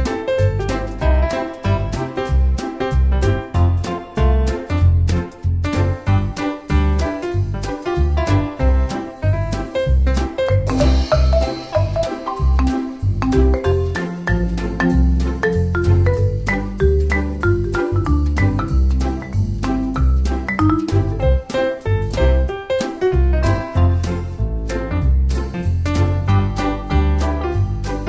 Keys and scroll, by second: 18.9-19.8 typing.